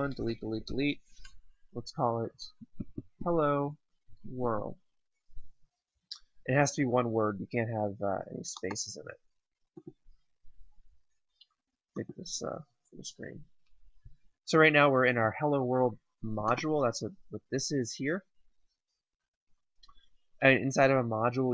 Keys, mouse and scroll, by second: 2.0-4.9 typing, 8.5 click.